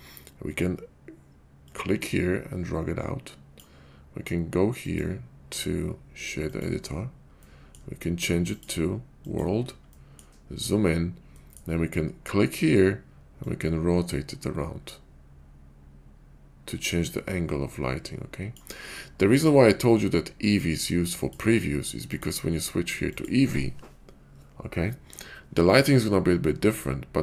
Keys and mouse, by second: 1.5-3.7 drag, 4.9-6.5 drag, 7.5 middle click, 8.5-10.0 drag, 10.0 middle click, 11.5 middle click, 13.4-18.6 drag, 22.1-24.2 drag.